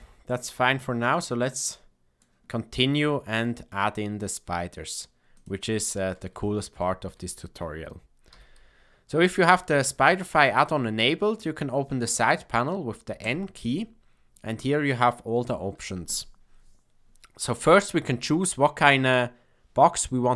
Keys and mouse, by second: 0.1 click, 1.6 click, 3.4-5.0 middle drag, 5.8 shift+middle drag, 6.8 shift+middle drag, 8.2 n, 13.1 click.